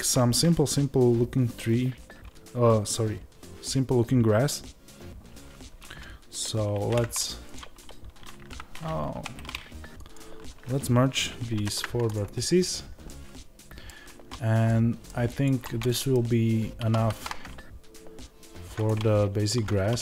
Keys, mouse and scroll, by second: 7.5 alt+m, 10.0-13.0 drag, 12.1 alt+m, 13.0-15.4 middle drag, 15.4 click, 15.5-16.7 middle drag, 16.7-18.8 drag, 16.7 s, 19.4 Tab.